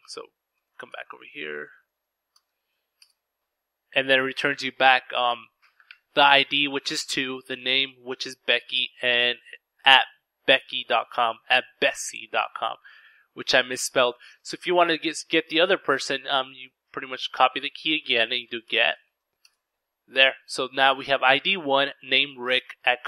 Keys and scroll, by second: 1.1 v, 1.4 Return, 16.6-18.0 typing, 19.6-20.4 typing.